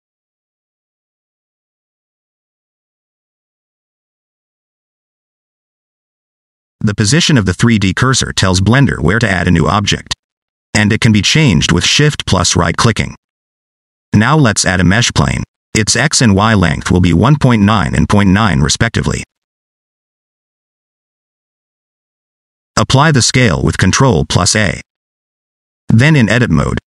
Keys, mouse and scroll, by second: 0.1 shift+middle click, 0.4 scroll down 1, 0.5 middle click, 1.0 shift+middle click, 1.3 shift+middle click, 1.6 middle click, 6.4 middle click, 10.7 click, 11.4 middle click, 13.4 shift+right click, 14.6 shift+a, 15.9 scroll up 1, 16.1 middle click, 16.5 shift+middle click, 16.6 middle click, 17.2-18.1 scroll up 1, 18.1 click, 19.6 click, 23.8 ctrl+a, 25.8 middle click, 26.5 Tab, 26.8 middle click.